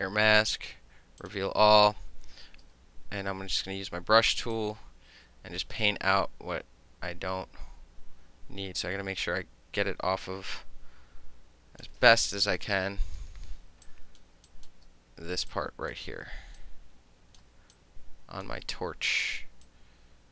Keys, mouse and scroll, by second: 1.3 click, 2.8 b, 4.6-11.9 drag, 12.7 ctrl+=, 12.9 ctrl+=, 13.4 space, 13.9 click, 14.6 click, 14.7 middle click, 15.6 click, 16.0 middle click, 16.7 click, 17.5 middle click, 17.5 space, 17.8 click, 18.5-19.7 middle drag, 19.7 click.